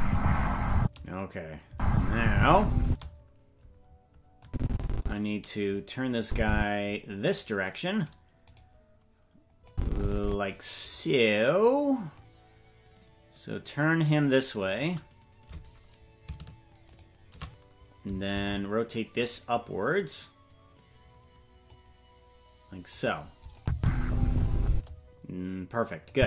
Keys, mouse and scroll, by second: 0.8 space, 1.7 space, 2.8 space, 4.4 click, 6.2 click, 6.9-7.5 scroll down 1, 7.8 scroll down 2, 8.5 right click, 9.7 click, 12.2-14.1 drag, 14.8 right click, 17.0 shift+right click, 21.7-22.9 drag, 23.6 click, 23.7 space, 24.7 space, 26.1 click.